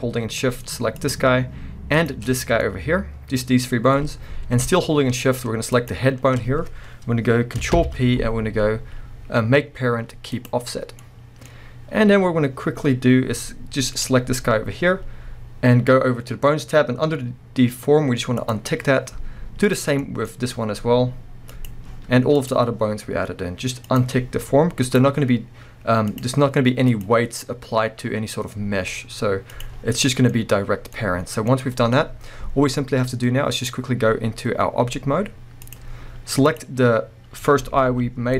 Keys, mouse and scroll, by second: 1.0 shift+click, 1.9 shift+click, 2.5 scroll down 1, 2.6-5.7 middle drag, 5.7 shift+click, 7.7 ctrl+p, 10.8 scroll down 1, 11.0-13.9 middle drag, 11.4-12.3 scroll up 2, 12.3-13.9 scroll up 1, 13.9 click, 18.4 click, 19.6 click, 20.0-21.5 middle drag, 20.3-21.5 scroll up 2, 21.5 click, 22.4 click, 23.9 click, 24.8 click, 26.1 click, 26.8 click, 28.1 scroll down 1, 29.5 click, 30.0-33.5 middle drag, 30.3-31.0 scroll up 1, 33.5-36.6 drag, 36.8-38.3 middle drag, 37.9 g.